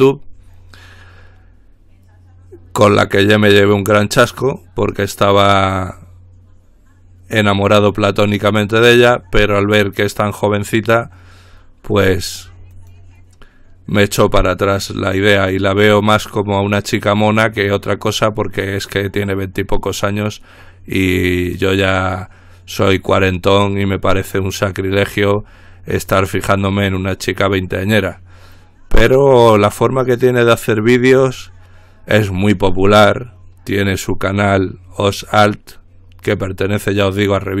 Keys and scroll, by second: 1.0 typing.